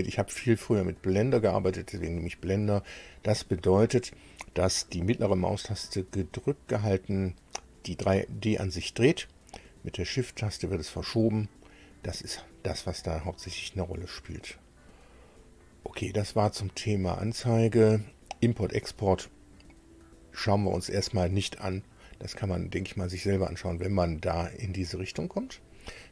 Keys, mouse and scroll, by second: 1.2 click, 16.8 click, 17.6 click, 25.5 click.